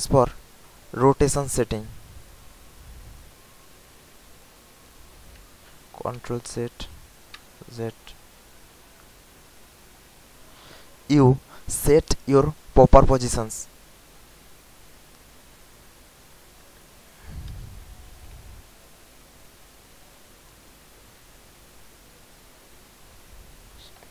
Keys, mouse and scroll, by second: 0.3 ctrl+click, 7.4 z, 14.7 ctrl+click, 17.0 click.